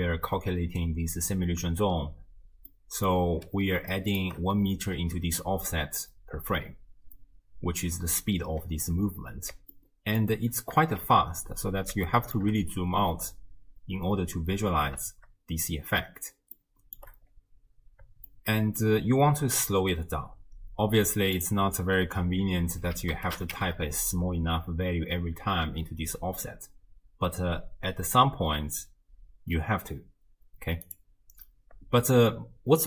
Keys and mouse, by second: 2.7 click, 3.9-4.3 shift+drag, 7.5 space, 8.2 space, 9.9-10.3 shift+drag, 10.8 shift+space, 12.1-12.5 shift+drag, 12.5 space, 14.5 space, 15.1 shift+space, 16.8 shift+click, 18.3-18.9 shift+drag, 21.4-30.9 drag.